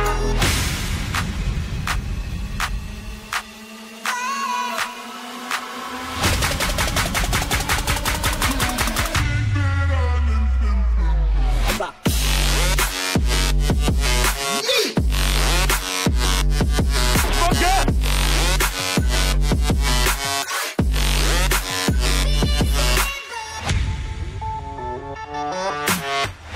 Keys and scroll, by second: 5.3 ctrl+d, 13.7 ctrl+d.